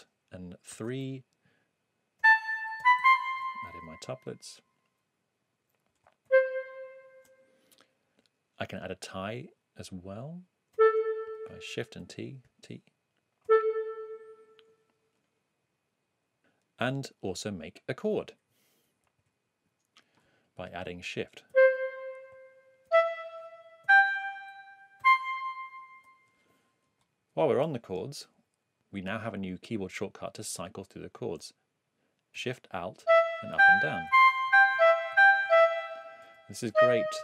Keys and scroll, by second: 0.7 alt+3, 2.1-3.4 typing, 6.2 shift+super+Down, 8.1 8, 10.7 a, 11.2 shift+a, 12.0 shift+t, 13.4 a, 19.2 super+Right, 21.5 c, 22.3 shift+c, 22.9 shift+e, 23.8 shift+g, 33.0 alt+shift+Up, 34.4 alt+shift+Down, 35.1 alt+shift+Up, 35.4 alt+shift+Down, 36.7 alt+shift+Down.